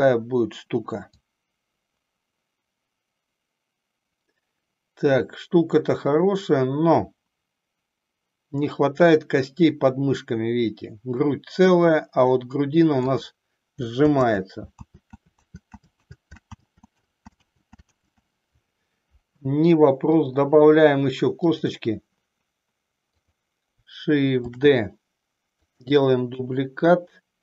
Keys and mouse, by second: 1.0-13.2 drag, 14.3 ctrl+z, 15.1 ctrl+z, 16.7 ctrl+z, 17.5 ctrl+z, 20.2-21.8 drag, 24.5 shift+d, 26.4 KP_1.